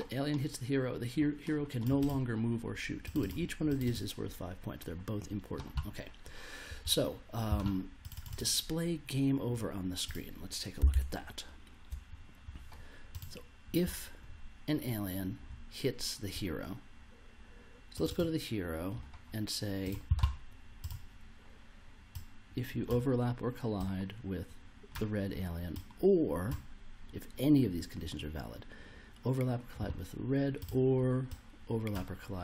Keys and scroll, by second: 10.9 super+Tab.